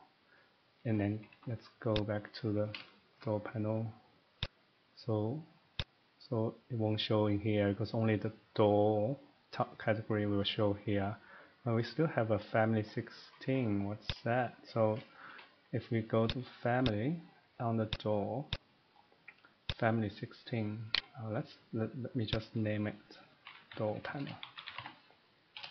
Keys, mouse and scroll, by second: 0.4 middle click, 0.5 middle click, 0.8 middle click, 1.1 Escape, 1.3 Escape, 1.9 click, 2.6 middle click, 3.2 shift+middle click, 4.5 click, 4.5 scroll, 5.8 click, 14.1 click, 15.2 Escape, 16.2 click, 16.8 click, 17.2-17.9 scroll, 17.9 click, 18.5 click, 18.9-19.2 scroll, 19.7 click, 21.0 right click, 22.4 click, 23.4-24.8 typing.